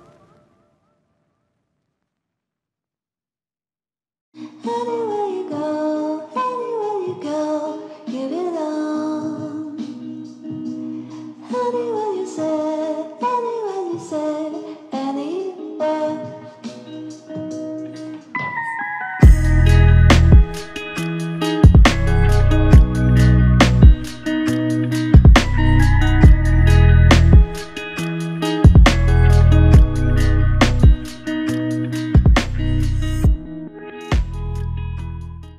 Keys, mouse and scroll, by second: 2.1 alt+click, 4.5-5.8 typing, 11.3 double click, 12.7 alt+click, 14.9 double click, 18.8 alt+click, 20.2 double click, 27.1 alt+click, 28.2 alt+click, 29.0 shift+click, 32.2 alt+click.